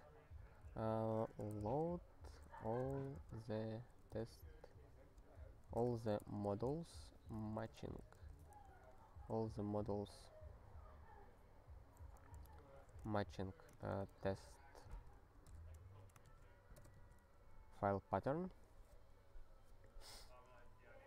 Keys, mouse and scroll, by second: 0.9-8.6 typing, 8.8 alt+b, 11.9 alt+f, 12.2 alt+f, 12.8-16.2 typing, 16.9 alt+/.